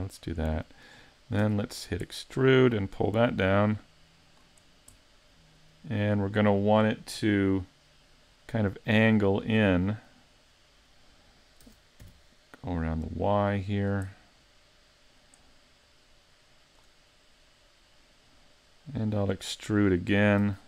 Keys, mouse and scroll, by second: 1.4 e, 1.8 click, 2.1 middle click, 3.1 click, 3.7 click, 4.6 scroll down 3, 5.0 middle click, 8.4 middle click, 11.7 r, 13.9 click, 14.2 middle click, 15.9 click, 17.1 middle click, 20.5 e.